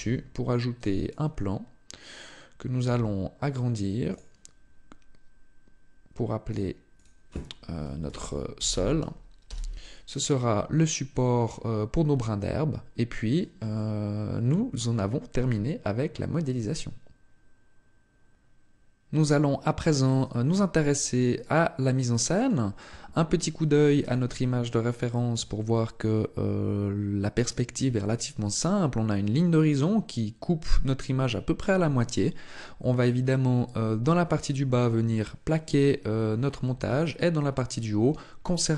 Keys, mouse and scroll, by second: 2.5 s, 3.8 click, 6.2 click, 6.7 click, 11.0-11.6 scroll down 1, 11.6-12.7 scroll up 1, 12.7 scroll up 2, 13.5 shift+middle click, 20.9 middle click.